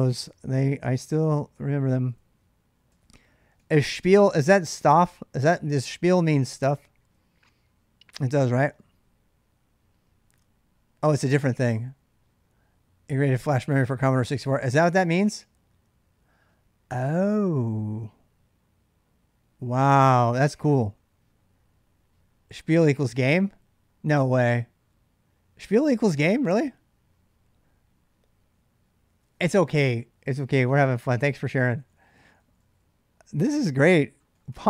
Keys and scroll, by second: 1.4-4.0 typing, 5.6 k, 6.9 j, 7.1 j, 14.2-14.7 k, 19.7 j, 20.0 j, 20.0 j, 20.8 j, 28.4 j, 30.3-32.6 typing, 33.9-34.6 typing.